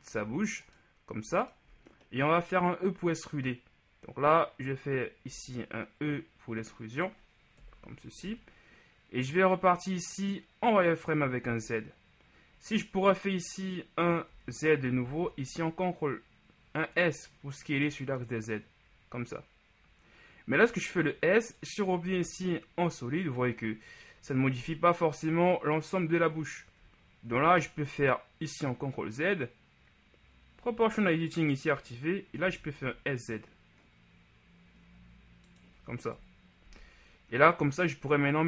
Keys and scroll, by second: 5.4 e, 7.6 KP_1, 8.3 z, 14.5-15.4 typing, 27.3 ctrl+z, 32.6 s, 32.8 z, 36.7 z.